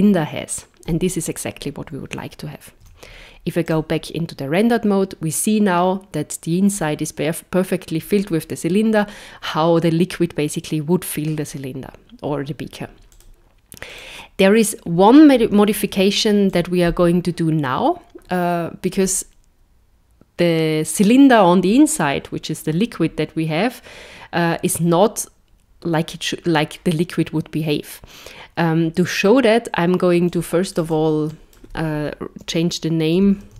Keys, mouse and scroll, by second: 0.9 KP_0, 2.8 z, 13.1 click, 13.9 click, 15.7 z, 30.3 click, 30.7 click, 30.9 click.